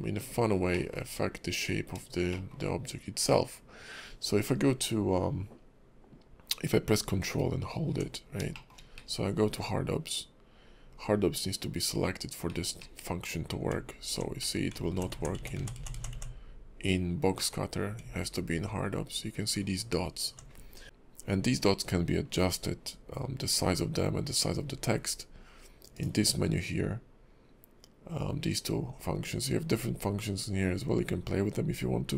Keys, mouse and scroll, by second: 0.7 middle click, 2.3 shift+middle click, 8.2 scroll down 2, 8.5 shift+middle click, 9.0 alt+w, 9.4-11.3 scroll up 1, 12.5 alt+w, 12.8 alt+w, 14.4 alt+w, 17.4 alt+w, 20.8 click, 25.9 click.